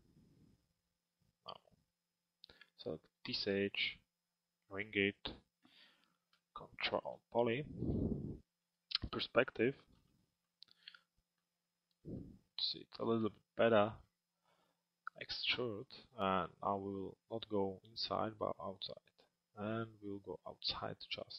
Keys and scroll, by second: 8.5 p, 10.0 alt+x.